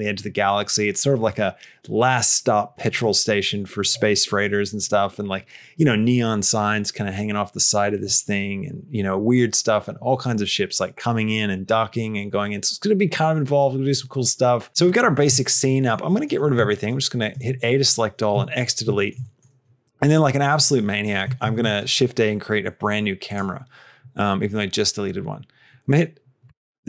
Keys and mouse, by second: 15.2 shift+middle click, 15.6 middle click, 16.0 middle click, 17.3 a, 18.2 x, 18.8 shift+middle click, 18.8 shift+click, 19.2 click, 21.3 shift+a, 26.3 KP_0.